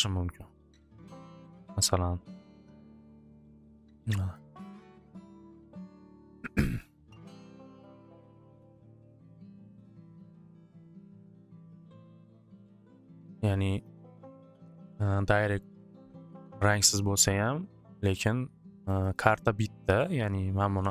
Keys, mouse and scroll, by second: 0.2 click, 0.4 click, 0.7-1.5 typing, 2.5 click, 2.6 click, 4.3 click, 6.1 right click, 6.7 click, 6.9 click, 8.1 click, 9.1 click, 11.0 click, 13.3 click, 13.9 click, 15.0 click, 18.1 click, 18.9 click, 19.1 click, 19.3 click, 19.5 click, 20.5-20.9 typing.